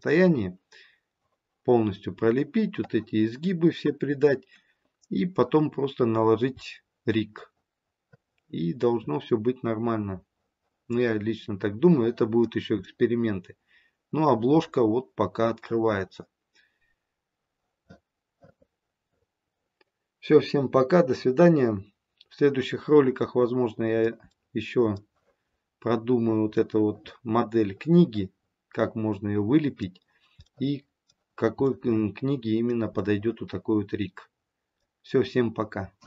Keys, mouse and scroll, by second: 6.1-6.8 scroll down 2, 6.6 middle click, 12.8 middle click, 23.1 middle click, 24.2 middle click, 26.0-26.5 scroll up 1, 26.5 middle click, 27.1 middle click, 30.6 middle click, 31.6 middle click, 32.9 middle click.